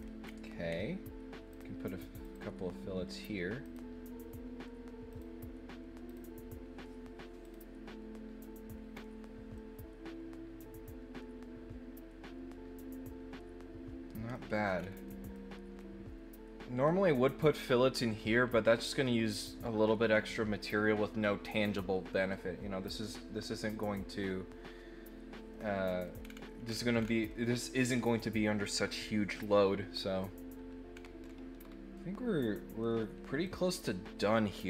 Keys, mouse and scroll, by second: 0.2 scroll down 2, 1.5 click, 2.2 click, 3.6 click, 5.1 click, 6.0 click, 7.4 click, 8.9 scroll down 1, 9.5-14.3 middle drag, 14.7 scroll up 2, 15.0 middle click, 15.8 middle click, 25.5 middle click, 26.2-27.1 scroll down 3, 27.2 middle click, 30.9 scroll down 2, 31.2-31.7 scroll up 3, 31.9 middle click, 33.4 click, 33.8 middle click.